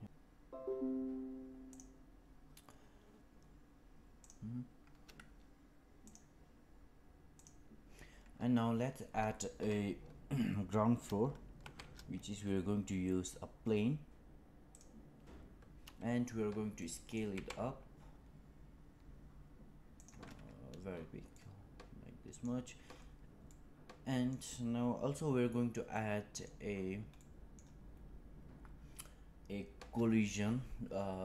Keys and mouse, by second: 11.5 shift+a, 16.7-17.1 middle drag, 17.2 s, 21.2-22.4 middle drag, 23.4-24.2 middle drag, 25.8-26.4 middle drag, 27.1 middle click.